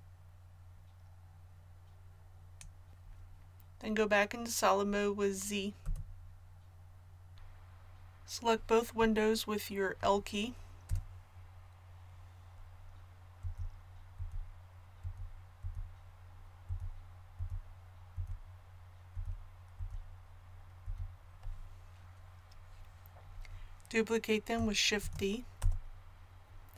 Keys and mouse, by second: 5.8 z, 10.9 l, 13.4-19.8 l, 25.0 shift+d.